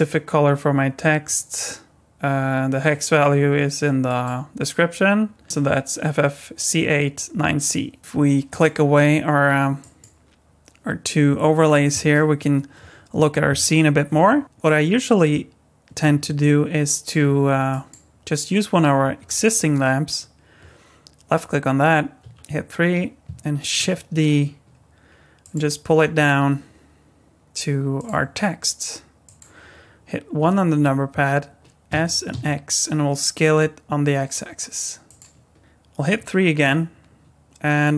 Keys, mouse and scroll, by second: 1.3 click, 8.5 click, 9.8 click, 14.4-16.0 scroll down 2, 16.4 middle click, 17.7 click, 22.2 KP_3, 23.8 shift+d, 26.2 s, 28.1 g, 30.4 KP_1, 31.9 s, 36.0 KP_3.